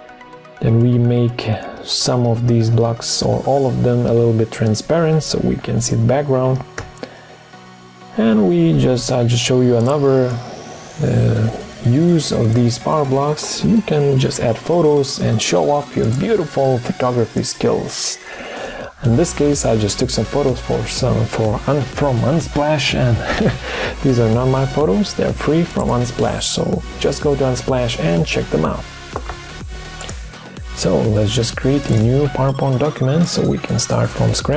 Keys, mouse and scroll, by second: 0.2 Down, 6.7 Down.